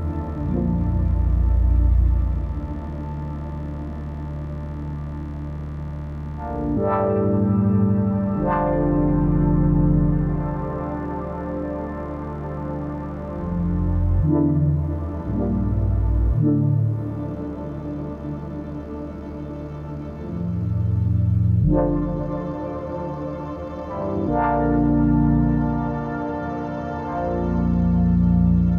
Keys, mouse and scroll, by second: 6.5 shift+Up, 7.0 Down, 7.7 Left, 9.9 shift+Left, 10.6 Up, 11.9 right click, 12.4 click, 16.6 click, 17.7 click, 18.3 shift+Left, 19.3 click, 19.4 typing, 19.8 shift+Left, 20.6-21.4 typing, 20.7 shift+click, 21.5 ctrl+g, 25.0 shift+Left, 25.9 click, 26.7 ctrl+g, 27.0 shift+click, 27.6 shift+Right.